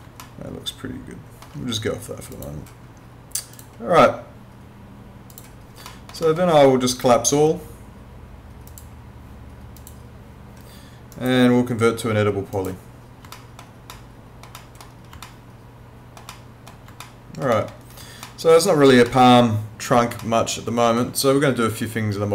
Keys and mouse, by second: 0.2 alt+middle click, 2.4 click, 5.9 alt+middle click, 6.9 right click, 8.7 click, 11.1 right click, 12.5 click, 13.4 alt+middle click, 15.3 alt+middle click, 17.0 alt+middle click, 18.3 alt+middle click, 20.2 alt+middle click.